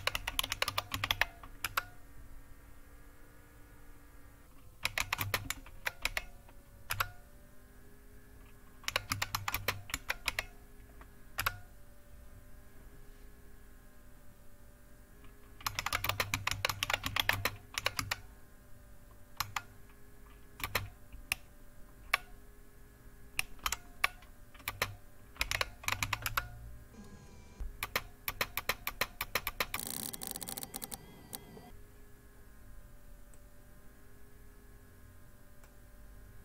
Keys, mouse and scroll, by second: 0.0-1.7 typing, 4.6-6.0 typing, 6.8 Return, 7.1 typing, 8.6-10.2 typing, 11.3 Return, 15.4-19.4 typing, 20.6 typing, 23.6 typing, 24.6-26.4 typing, 27.8-31.3 typing, 33.4-36.4 drag.